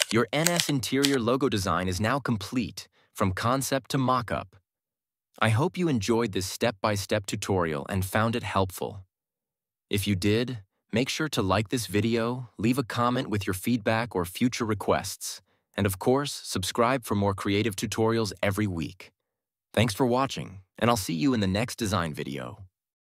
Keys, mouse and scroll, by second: 0.5 ctrl+=.